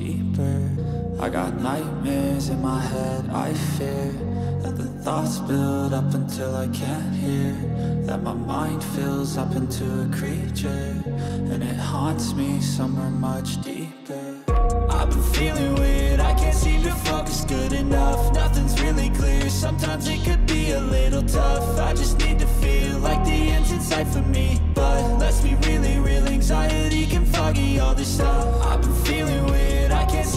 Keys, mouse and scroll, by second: 1.2 shift+click, 1.2 shift+right click, 3.5 click, 4.2-5.1 drag, 5.5 click, 6.5-10.1 drag, 10.6-12.6 middle drag, 12.9 middle click, 13.1 e, 15.6 shift+click, 15.6 shift+right click, 15.9-17.8 middle drag, 18.7 alt+shift+right click, 19.1 middle click, 20.2 shift+right click, 20.6 middle click, 21.8 middle click, 23.2 shift+d, 27.4-29.7 middle drag, 30.0 middle click.